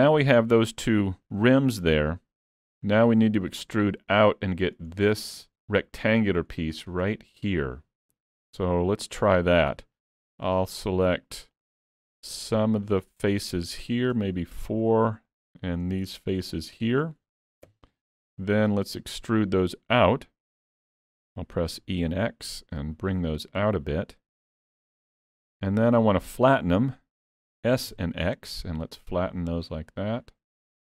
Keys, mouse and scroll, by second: 1.6 middle click, 4.9 scroll up 3, 5.2 shift+middle click, 6.0 scroll down 1, 8.9 middle click, 9.7 3, 10.3 click, 11.6 shift+click, 13.8 middle click, 14.4 shift+click, 16.1-16.5 scroll down 3, 16.5 middle click, 17.8 KP_Decimal, 18.3 middle click, 18.9 scroll up 1, 19.4 middle click, 20.8 middle click, 21.8 e.